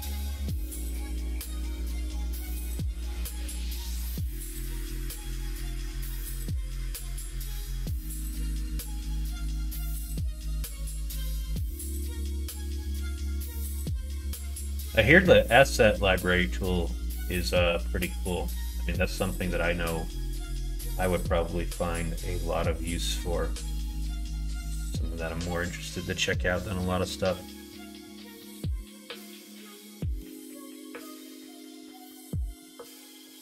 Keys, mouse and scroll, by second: 1.0 middle click, 1.7 middle click, 3.3 middle click, 3.7 shift+middle click, 4.2 middle click, 5.2-9.4 middle drag, 26.3-30.2 middle drag, 31.8 middle click, 33.0 Tab.